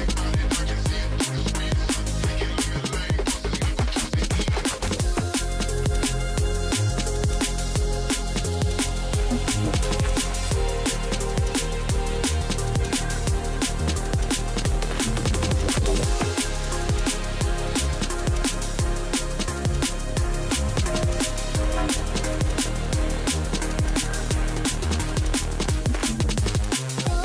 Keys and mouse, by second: 7.4 middle click, 9.4 shift+middle click, 10.9 middle click, 11.6 s, 12.7 middle click, 15.3 s, 16.3 middle click, 17.5 middle click, 19.5 middle click, 19.8 middle click, 20.4 middle click, 20.7 click, 21.4 s, 22.1 middle click, 22.5-22.9 drag, 23.2 shift+drag, 23.6 middle click.